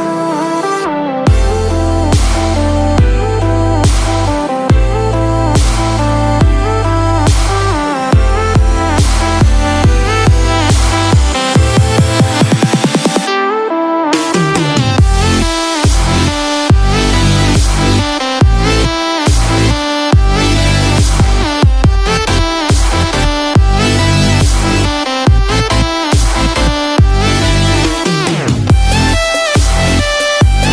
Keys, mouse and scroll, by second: 6.0-6.4 scroll down 2, 6.3-8.3 scroll up 2.